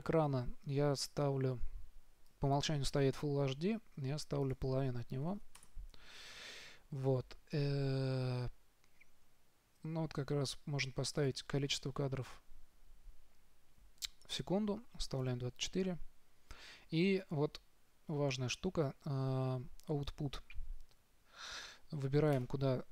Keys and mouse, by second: 2.6-4.4 drag, 11.5-17.1 drag, 17.1-22.6 middle drag.